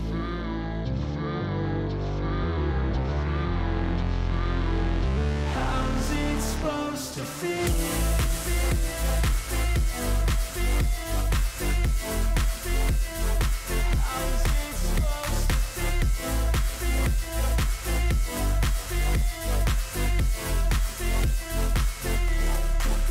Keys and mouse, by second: 0.0 ctrl+shift+click, 1.4-2.4 drag, 5.4-6.5 drag, 7.5 click, 8.4 click, 9.8 ctrl+shift+click, 11.6-12.6 drag, 13.7 click, 16.0-17.4 drag, 18.4 click, 19.5 click, 20.5 ctrl+shift+click, 22.1-23.1 drag.